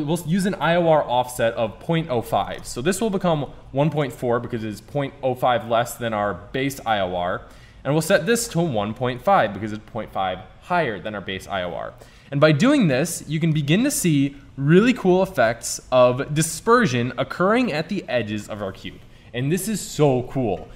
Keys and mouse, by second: 2.5-4.4 drag, 8.4-10.4 drag, 15.5 middle click.